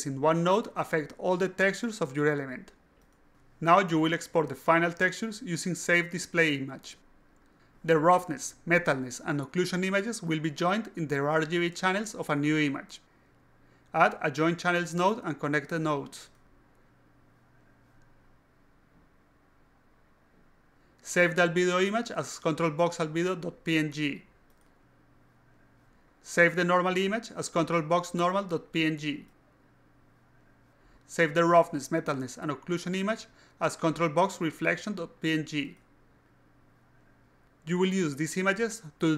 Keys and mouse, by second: 0.7-1.0 alt+drag, 1.2-2.0 alt+drag, 2.5-3.1 alt+drag, 10.5 click, 10.7 click, 11.1 click, 12.1 alt+click, 14.8 click, 16.7 click, 17.8 click, 19.0 click, 19.9 click, 20.4 click, 22.3 click, 22.8 click, 23.5-25.9 typing, 26.6 click, 27.6 click, 28.1 click, 28.4-30.7 typing, 31.4 click, 32.2 click, 32.8 click, 33.2-35.9 typing.